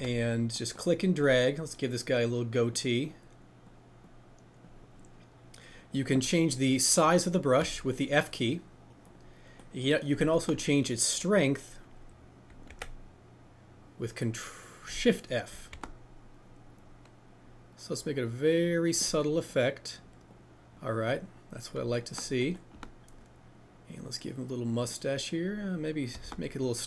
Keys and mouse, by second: 0.2 ctrl+z, 12.7 ctrl+f, 14.8 click, 15.7 shift+f, 19.6-21.7 drag, 26.2 shift+f.